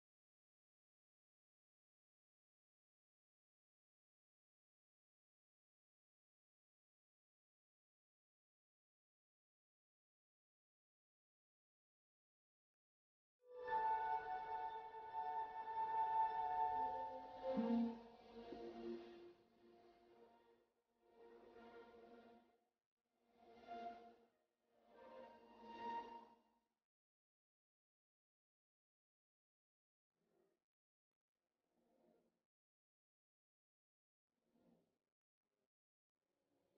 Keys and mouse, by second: 1.0-11.1 drag, 1.0 middle click, 12.4-21.7 drag, 21.7-30.0 middle drag, 30.0-33.8 drag.